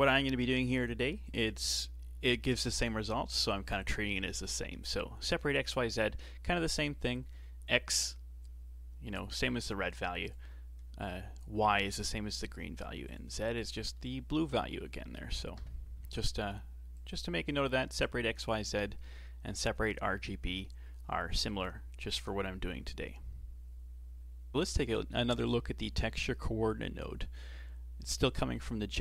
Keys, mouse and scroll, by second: 10.3 ctrl+shift+click, 13.1 ctrl+shift+click, 14.0-15.5 middle drag, 15.5 KP_7, 17.0 click.